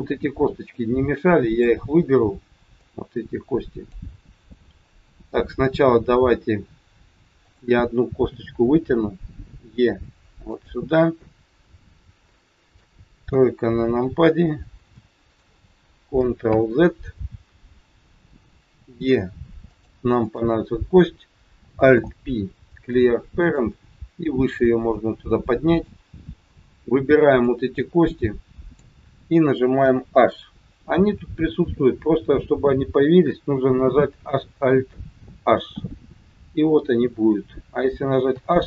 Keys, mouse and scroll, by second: 0.7 click, 2.8 click, 5.1 click, 7.3 click, 9.3 e, 11.2 middle click, 13.3 KP_3, 13.8-14.2 scroll up 4, 14.3-14.7 scroll down 2, 14.9 shift+middle click, 16.4 ctrl+z, 18.8 e, 20.2 click, 21.8 alt+p, 24.5 click, 26.0-27.0 scroll down 7, 27.3 click, 29.7 h, 35.7 alt+h, 38.2 h.